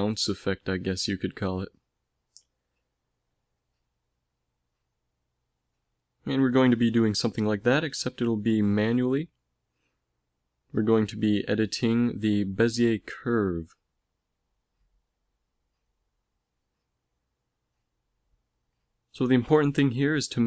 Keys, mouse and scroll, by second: 0.7 click, 7.5 n, 8.2 n, 9.4 t, 11.6 click, 13.9 a, 14.3 a, 15.3 t, 19.0 middle click, 19.9 a, 20.3 b.